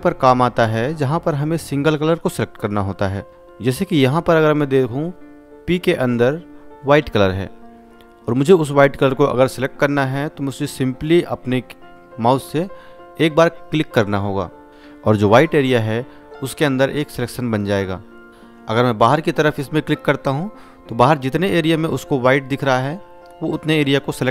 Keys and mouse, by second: 1.3-2.5 drag, 4.7 space, 4.9 ctrl+click, 6.2 space, 6.4 alt+click, 9.9 click, 17.4 click, 18.3 ctrl+d, 21.2 click.